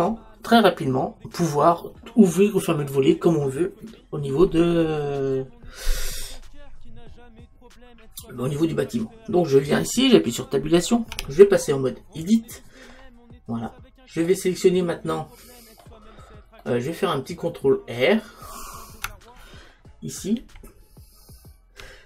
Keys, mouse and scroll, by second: 11.2 Tab, 12.9-16.7 middle drag, 20.4 ctrl+r.